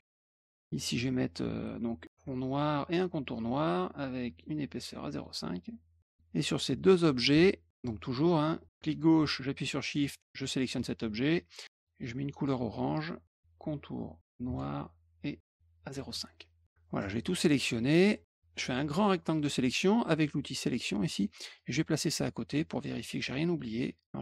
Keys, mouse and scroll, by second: 0.3 click, 0.6 click, 2.2 click, 3.0 middle click, 4.3 right click, 5.1 click, 5.5 click, 6.7 click, 8.5 click, 9.9 shift+click, 11.7 click, 12.3 click, 14.4 right click, 15.8 click, 16.9-18.0 drag, 18.2 click, 20.7 middle click, 21.5-22.7 drag, 23.1 middle click, 23.7 middle click.